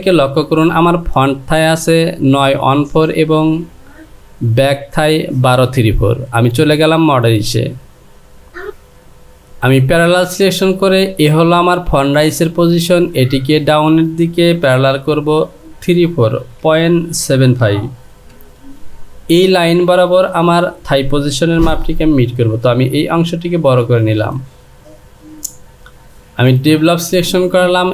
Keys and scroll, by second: 15.2 Down, 18.3 typing, 21.9 Return.